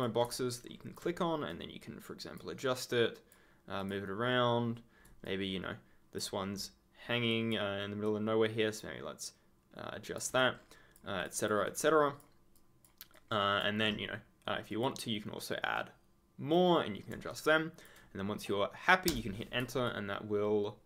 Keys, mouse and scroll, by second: 0.5 ctrl+click, 0.6-1.0 ctrl+scroll up 1, 5.2 ctrl+click, 5.3-6.3 ctrl+scroll up 1, 7.2 click, 10.3 ctrl+click, 10.5 ctrl+scroll down 1, 11.7 ctrl+scroll down 1, 11.8-12.2 ctrl+scroll, 13.2-14.1 ctrl+scroll up 1, 14.6 click, 15.7 right click, 17.2 ctrl+click, 17.4-18.4 ctrl+scroll down 1, 19.0 Return, 19.8 ctrl+click.